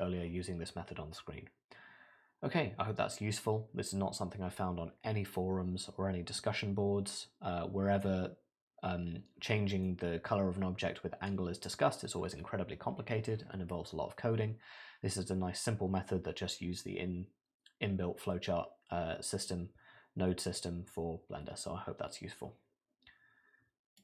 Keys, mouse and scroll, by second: 6.4 middle click, 9.9 middle click.